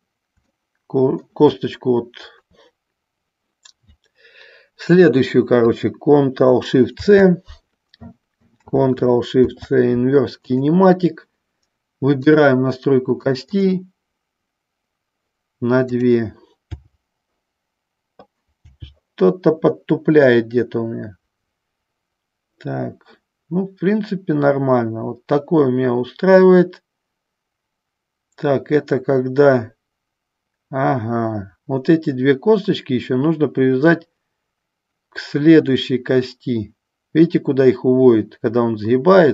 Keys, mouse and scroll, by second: 0.6 shift+middle click, 7.1 ctrl+shift+c, 10.7 ctrl+shift+c, 13.3 click, 13.7 click, 16.1-18.9 drag, 18.9 g.